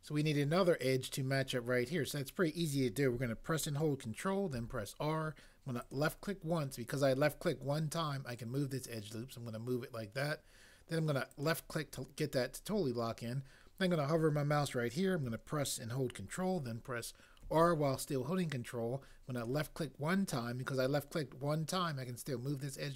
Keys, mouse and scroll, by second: 4.5 ctrl+r, 17.4 ctrl+r.